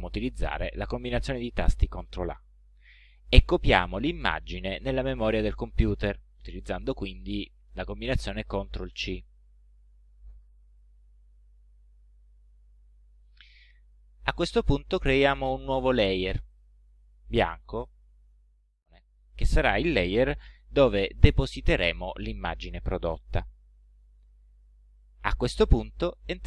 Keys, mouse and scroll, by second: 1.7 click, 5.5 ctrl+a, 8.9 ctrl+c, 16.6 click, 17.8 click, 18.8 click.